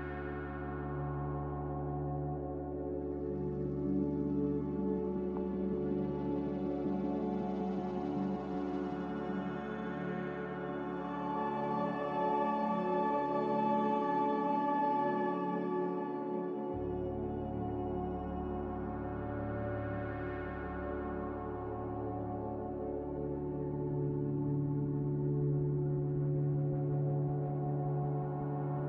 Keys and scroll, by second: 0.3 z, 10.8 a, 11.3 Delete, 12.1 Delete, 14.6 z, 15.2 s, 16.9-18.7 typing, 20.7 n, 21.9 a, 28.1 n.